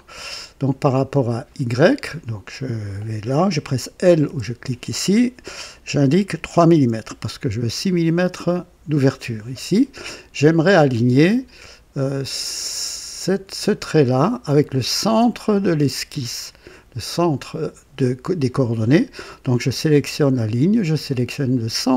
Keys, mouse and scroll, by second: 4.2 typing, 6.3 KP_3, 6.6 Return, 6.8 KP_Enter, 10.8-13.6 drag, 15.1 click, 21.6 click.